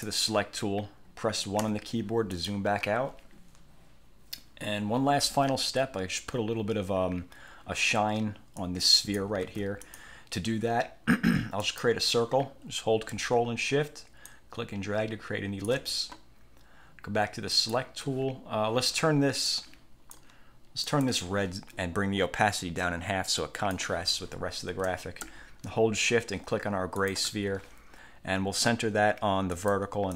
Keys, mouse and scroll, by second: 0.0 click, 1.7 1, 2.4 click, 8.7 click, 9.6 ctrl+z, 10.0 ctrl+click, 11.7 click, 14.4-16.0 ctrl+shift+drag, 17.6 click, 19.6 click, 21.0 click, 22.8-24.1 drag, 27.1 shift+click, 29.7 click.